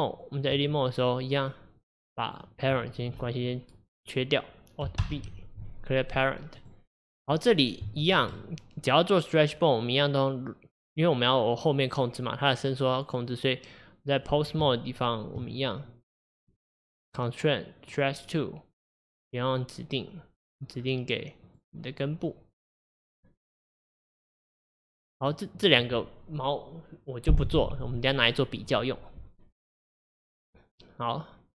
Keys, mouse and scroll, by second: 0.5 Tab, 2.3 click, 6.2 alt+p, 6.7 click, 7.2 click, 7.9-15.4 shift+middle drag, 15.4 Tab, 18.0-20.6 drag, 23.8-24.5 drag.